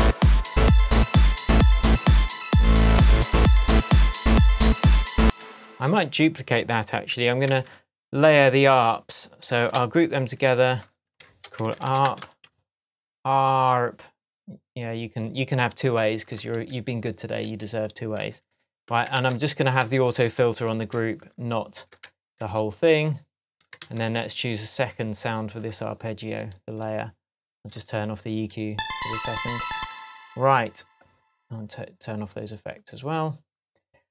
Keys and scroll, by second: 5.2 space, 7.5 super+d, 10.2 shift+super+g, 10.8 super+g, 11.2 super+r, 11.5-12.3 typing, 12.9 Return, 17.4 Down, 19.1 super+c, 19.8 BackSpace, 21.9 BackSpace, 23.8 super+v, 28.7 space.